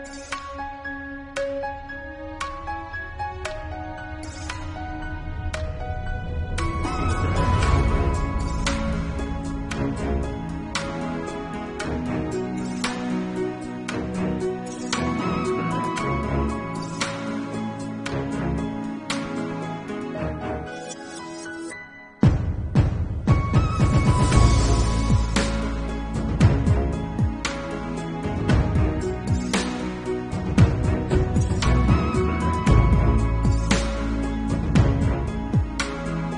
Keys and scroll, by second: 0.4 ctrl+s, 1.2 ctrl+alt+z, 1.9 ctrl+alt+z, 2.2 ctrl+s, 2.6 ctrl+alt+z, 3.4 ctrl+s, 4.0 ctrl+z, 4.7 ctrl+s, 6.6 space, 7.7-8.3 typing, 8.4 Return, 9.6 3, 20.0 ], 22.8 3, 23.6 [, 29.3 6, 31.6 ctrl+alt+z, 31.9 3, 32.0 [, 33.3 ctrl+z, 35.0 ctrl+z, 35.3 1.